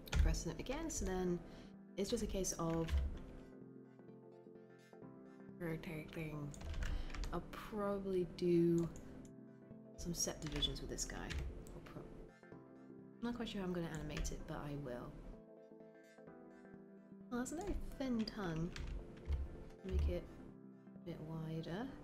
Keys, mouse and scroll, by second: 2.9 e, 11.2 w, 19.8 r.